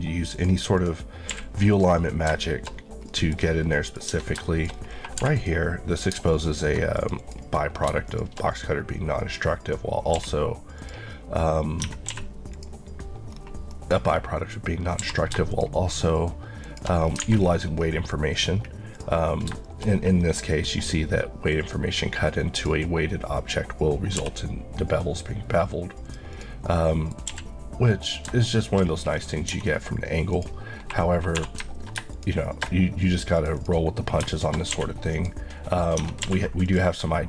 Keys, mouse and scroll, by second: 0.3 click, 1.3 q, 1.8 click, 2.4 shift+middle click, 2.7-3.1 scroll up 1, 3.1 middle click, 3.4-3.8 scroll up 1, 3.8 middle click, 4.2 Tab, 4.5 shift+middle click, 4.7-5.3 shift+scroll up 2, 5.3 3, 5.4 click, 7.2 Left, 10.2 q, 10.8 click, 11.9 Tab, 12.1 q, 12.5 click, 13.3 scroll up 1, 13.8 middle click, 15.0 q, 15.5 shift+click, 17.0 Left, 17.1-17.5 scroll down 3, 17.2 alt+a, 18.2 middle click, 18.6 scroll down 1, 19.0 click, 19.4-20.0 scroll up 4, 19.7 shift+middle click, 21.6 click, 24.2 b, 26.1 click, 26.7 middle click, 27.3 q, 28.1 click, 28.5 shift+middle click, 28.9 shift+scroll up 1, 29.5 Tab, 29.8-30.4 scroll up 1, 30.4 click, 31.4 3, 32.1 alt+shift+click, 33.6 Left, 34.8 q, 35.2 click, 36.1 Tab, 36.3 q, 36.7 click.